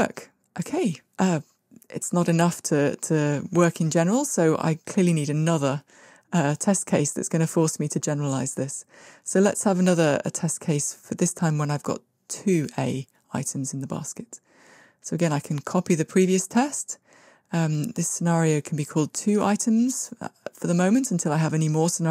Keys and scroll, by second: 0.1 shift+Escape, 8.4 super+c, 11.6 super+v, 13.8 alt+shift+Up, 15.0 super+c, 15.9 super+v.